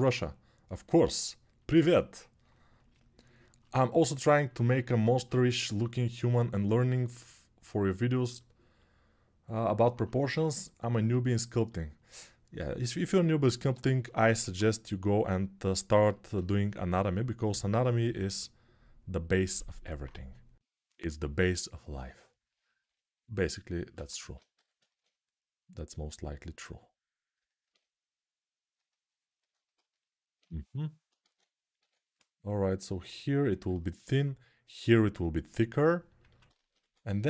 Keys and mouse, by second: 5.7-6.7 alt+middle drag, 14.1 ctrl+Tab, 15.7 ctrl+r, 20.8 6, 24.3 g, 31.0 ctrl+z, 31.5 6, 36.6 1.